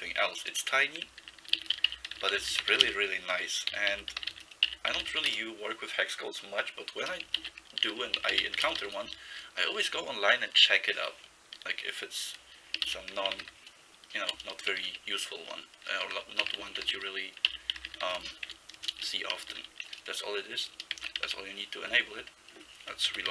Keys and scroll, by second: 1.0-5.7 typing, 7.2-9.3 typing, 12.7-14.8 typing, 16.0-20.2 typing, 21.0 ctrl+c, 21.3 ', 23.1 ctrl+c.